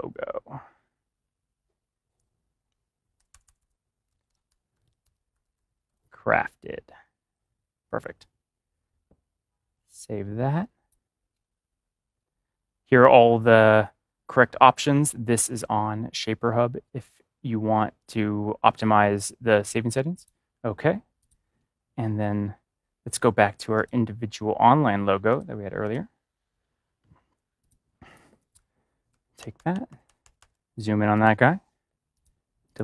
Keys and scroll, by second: 3.0-5.8 typing, 29.3 ctrl+=.